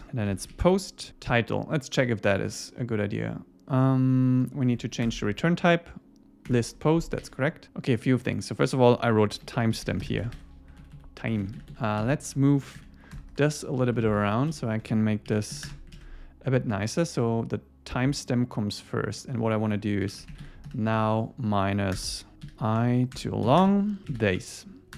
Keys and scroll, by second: 1.1 Tab, 5.0 alt+Return, 6.5 Return, 7.2 super+s, 10.4 Escape, 10.8 alt+Left, 11.4 alt+shift+Right, 12.0 alt+shift+Right, 12.8 super+x, 13.9 alt+Left, 14.4 alt+Left, 15.3 super+v, 15.9 super+s, 22.0 Return, 23.2 Return.